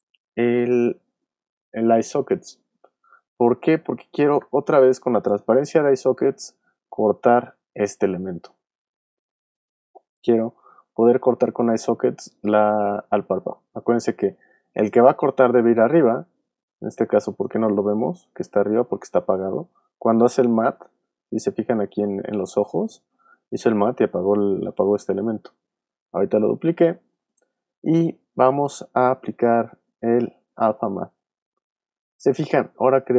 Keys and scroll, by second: 4.4 super+d.